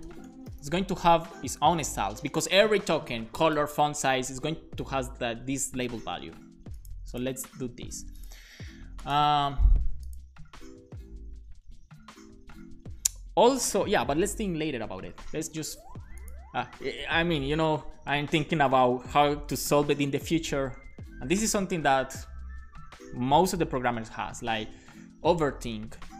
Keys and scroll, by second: 0.0-1.5 typing, 1.7 Return, 2.0 super+s.